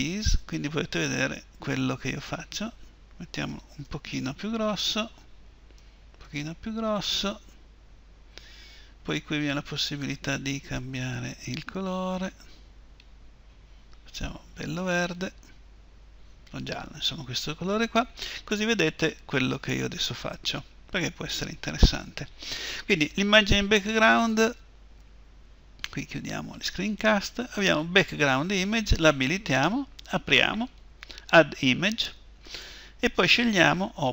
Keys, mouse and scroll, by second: 2.3-4.6 drag, 11.1-13.2 drag, 26.5-34.1 drag.